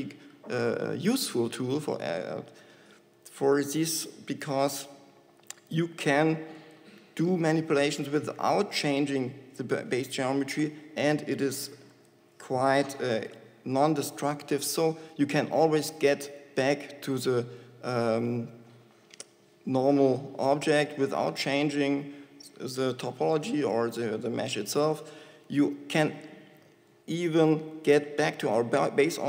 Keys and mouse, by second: 1.8-4.7 shift+drag, 5.8 ctrl+c, 6.1 ctrl+x, 6.9-8.8 drag, 27.5 Tab.